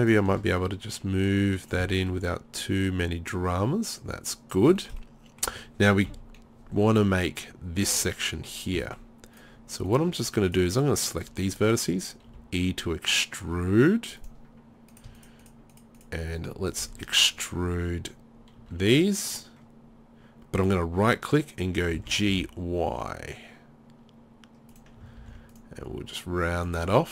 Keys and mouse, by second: 2.8-4.5 middle drag, 6.1 KP_3, 8.9 middle click, 9.6-10.7 right drag, 12.3 e, 14.9-16.0 right drag, 16.0 middle click, 16.8 KP_3, 18.6 e, 20.7-24.7 drag, 22.0 g, 24.8 click, 25.2 ctrl+r.